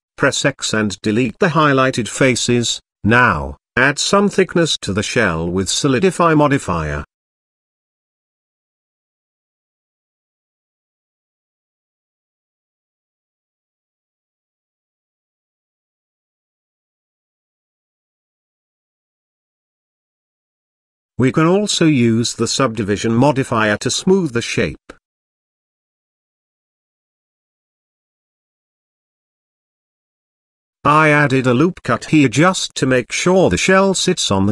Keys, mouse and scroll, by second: 1.4 x, 2.5-3.8 middle drag, 5.2 Tab, 5.8-6.4 middle drag, 6.5 scroll up 1, 7.2-7.8 middle drag, 8.4-11.4 drag, 12.7-13.0 shift+middle drag, 13.1-14.7 scroll up 3, 14.7-20.6 drag, 14.7-15.3 scroll up 1, 20.8 click, 21.9-25.1 drag, 26.1-27.4 middle drag, 29.2 Tab, 30.7 ctrl+r.